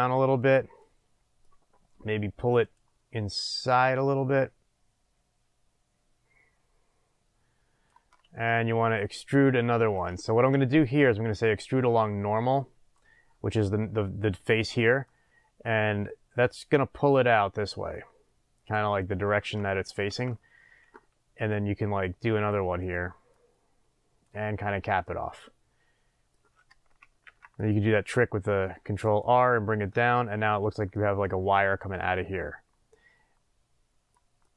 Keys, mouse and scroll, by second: 0.1 click, 0.8-2.6 middle drag, 2.6 click, 3.5-9.5 drag, 9.6-10.9 middle drag, 10.9-15.1 drag, 18.9 scroll up 1, 19.1-22.0 middle drag, 22.0-23.1 drag, 23.3 click, 25.0-27.2 middle drag, 27.2 ctrl+r, 29.1 click, 29.8-34.5 middle drag.